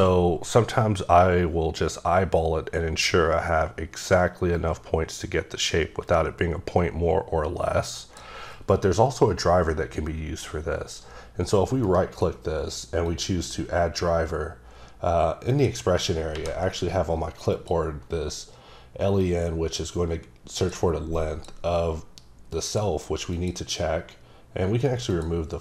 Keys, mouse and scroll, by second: 13.0 click, 15.5 click, 16.3 ctrl+v, 17.5 click, 19.2 click, 21.1 click, 22.7 click, 23.3 click, 25.1 click.